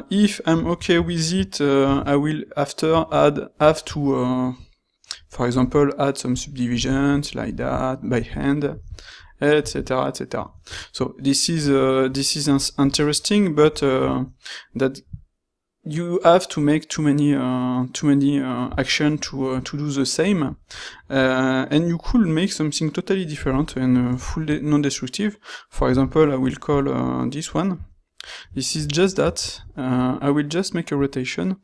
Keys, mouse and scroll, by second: 2.0 ctrl+x, 5.5 ctrl+r, 23.3 x, 29.3 ctrl+shift+q.